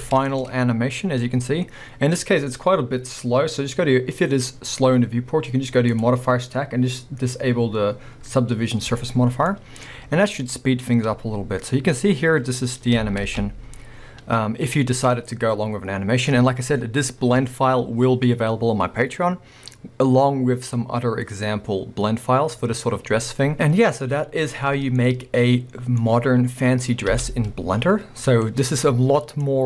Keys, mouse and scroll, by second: 3.6-6.2 middle drag, 9.1 click, 9.6-13.7 middle drag, 15.0 middle click, 16.4-29.6 middle drag.